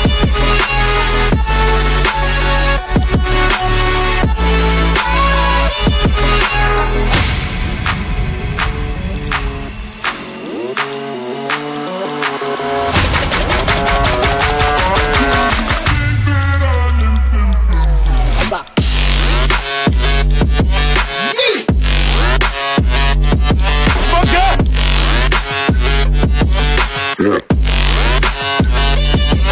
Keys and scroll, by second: 0.3 ctrl+alt+z, 0.4 ctrl+alt+z, 0.7 ctrl+alt+z, 22.6 ctrl+alt+z.